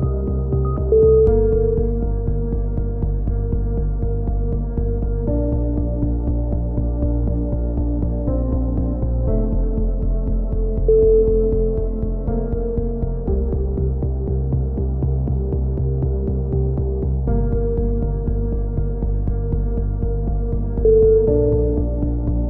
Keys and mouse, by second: 0.2 alt+m, 2.0-2.6 right drag, 2.1-3.5 drag, 3.3-5.3 typing, 5.6 Tab, 6.1-6.6 drag, 7.3-8.3 drag, 7.6 KP_7, 8.3 Tab, 8.5 z, 8.8-9.3 drag, 9.3 middle drag, 9.3-10.2 drag, 11.3 a, 15.0 z, 17.3 click, 19.3 KP_7, 19.5-19.8 drag, 20.1-20.5 middle drag, 20.1 z, 20.5 click, 22.0-22.4 drag.